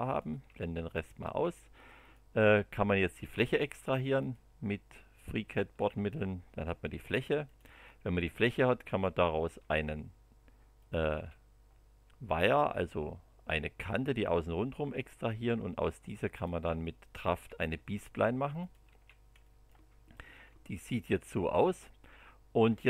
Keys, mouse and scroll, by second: 0.0 click, 0.3 space, 0.9 click, 1.2 space, 2.0 click, 4.2 click, 5.7 space, 7.4 click, 7.6 space, 8.9 click, 9.4 space, 10.8 click, 11.1 space, 16.3 click, 17.2 space, 18.6 click, 18.8 space, 19.4 middle click, 20.5 KP_1, 20.9 KP_2.